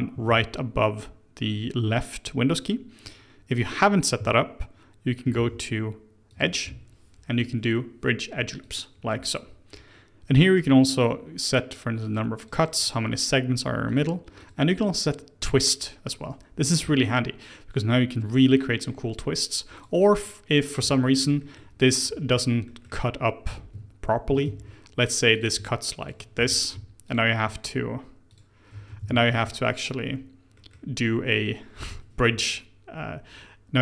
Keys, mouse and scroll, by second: 0.2 ctrl+z, 5.3 ctrl+z, 6.3-9.3 drag, 12.0-17.9 drag, 17.9-19.7 middle drag, 19.7-21.3 drag, 21.3-24.4 middle drag, 24.4 ctrl+z, 25.3 click, 26.0 shift+click, 26.3 f, 27.0 alt+click, 28.2 alt+shift+click, 28.9 ctrl+z, 29.5 ctrl+click, 30.5-33.6 middle drag.